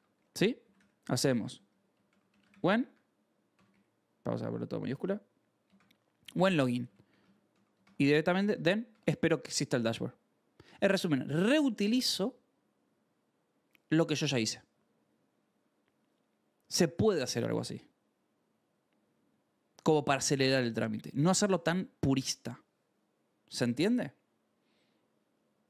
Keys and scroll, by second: 0.0-4.8 typing, 5.8 ctrl+s, 5.9-8.4 typing, 7.4 Escape, 8.8 Escape.